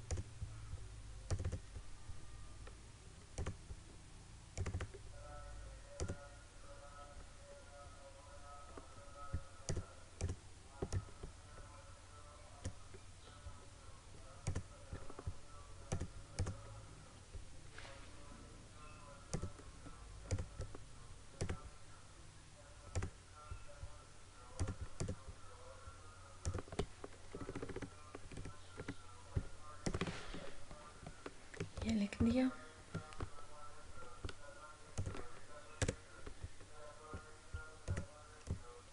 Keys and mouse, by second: 9.8-14.5 drag, 19.4 click, 27.4 Right, 28.3 Up, 28.8 Right, 29.9 click, 31.9 ctrl+-, 35.0 click, 38.0-38.9 drag.